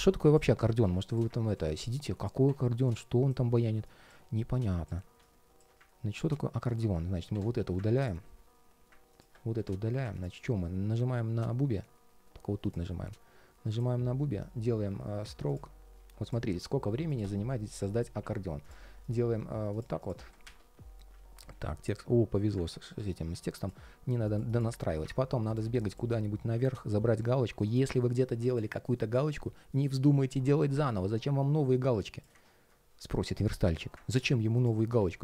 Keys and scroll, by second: 26.4 super+v, 27.6 super+c, 34.7 super+v.